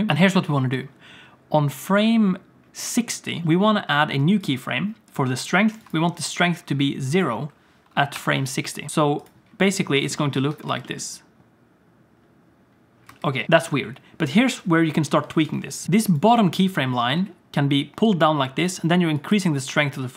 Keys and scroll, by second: 0.1 ctrl+s, 8.1 i, 10.4 Tab, 10.5 Tab, 10.7 space, 13.1 space, 17.2 g, 19.9 g.